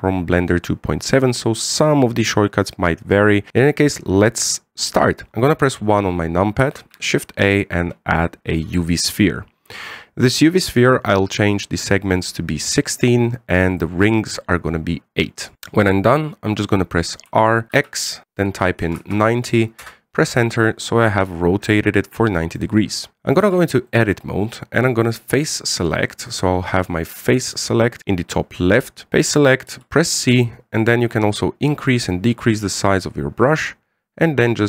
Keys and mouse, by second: 6.4 KP_1, 7.6 shift+a, 12.8-14.6 drag, 14.9 click, 16.0-16.5 middle drag, 17.7 r, 21.4-23.1 middle drag, 23.2 middle click, 24.2 Tab, 24.7 middle click, 27.7 click, 27.9 click, 29.5 right click, 30.5 c.